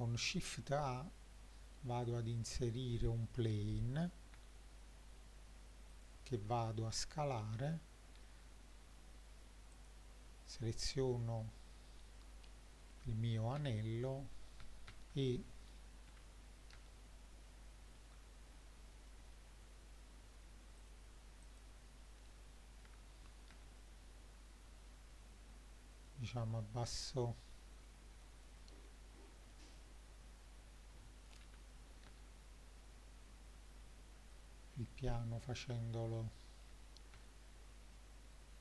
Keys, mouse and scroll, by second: 4.4 s, 5.9 click, 6.4-7.2 scroll down 2, 7.6 KP_1, 9.7 click, 12.9 g, 13.6 z, 14.9 Escape, 16.1 g, 16.8 z, 18.0 Escape, 18.7-19.1 middle drag, 20.8 click, 21.5 click, 22.9 g, 23.5 z, 26.0 click, 26.5-27.1 scroll up 4, 27.1 middle drag, 27.7 scroll up 3, 28.3-28.6 middle drag, 28.7-29.4 scroll up 6, 29.5-29.8 middle drag, 31.5 g, 32.1 z, 34.4 click, 34.7-36.2 scroll down 6, 36.2-37.0 middle drag, 37.3-38.6 shift+middle drag.